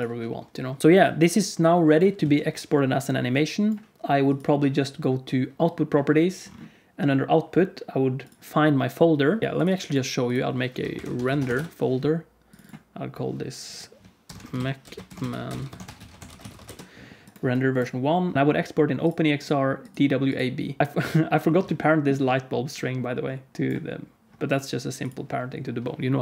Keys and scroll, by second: 0.8 F11.